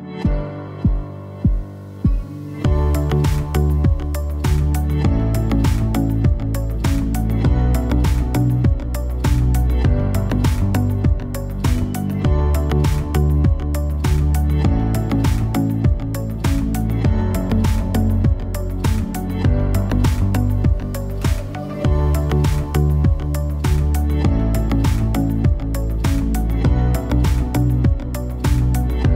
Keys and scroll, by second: 4.8 super+[, 12.6 super+c, 15.0 super+x, 16.7 super+f, 22.0 i, 24.3 v.